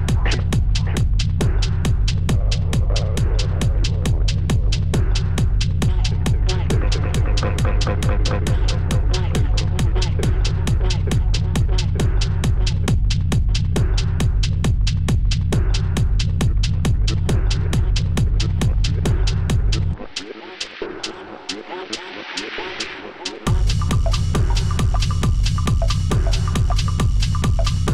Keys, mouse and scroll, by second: 0.4 space, 0.6 space, 0.8 space, 1.1 ctrl+z, 1.7-2.6 scroll down 12, 2.6-3.0 scroll down 9, 5.7 Delete, 6.4 double click, 8.0 double click, 8.4 Return, 9.3 b, 10.0 ], 10.0 ], 12.2 shift+click, 12.4 shift+click, 13.6 Return, 13.6 shift+click, 14.7 b, 15.1-15.7 [, 16.4 double click, 16.6 double click, 16.8 double click, 17.2 double click, 17.4 double click, 17.6-18.7 double click, 18.5 double click, 18.6 double click, 19.1 double click, 19.5 double click, 20.0 ctrl+z, 20.9 double click, 21.0 double click, 22.9 right click, 23.0 right click, 24.7-26.7 typing, 25.7 double click, 25.9 double click, 26.5 double click, 26.7 double click, 26.9 double click, 27.0 double click, 27.7 double click.